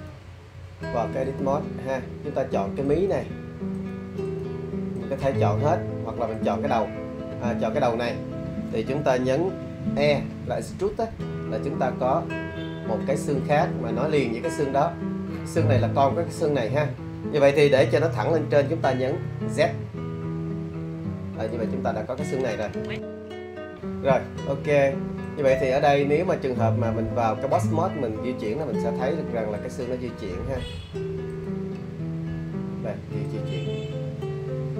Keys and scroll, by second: 10.5 e, 19.2 z.